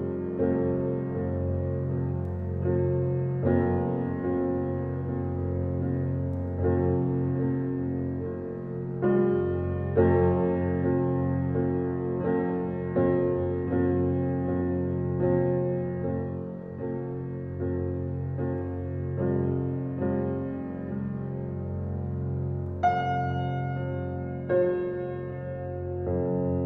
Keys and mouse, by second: 1.3-2.2 right drag, 5.6 click, 6.7 ctrl+v, 8.1 right click, 9.2-10.8 drag, 11.0-12.6 drag, 13.0 BackSpace, 13.2 BackSpace, 13.6 BackSpace, 14.7-16.6 typing, 17.3 click, 18.0 middle click, 18.1-18.8 typing, 18.2 click, 21.2 right click, 22.1-22.7 drag, 24.2-25.0 drag.